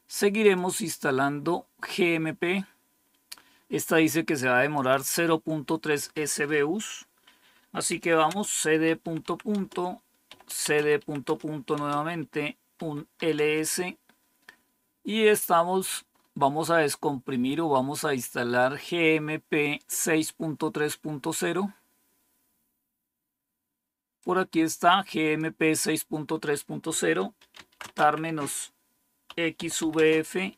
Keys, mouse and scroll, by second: 0.3 click, 4.7 click, 7.6-13.6 typing, 16.0-16.7 scroll up 1, 20.3-21.8 scroll up 1, 21.8-24.1 scroll up 1, 24.1-25.3 drag, 25.7-26.5 scroll down 3, 27.1-30.5 typing.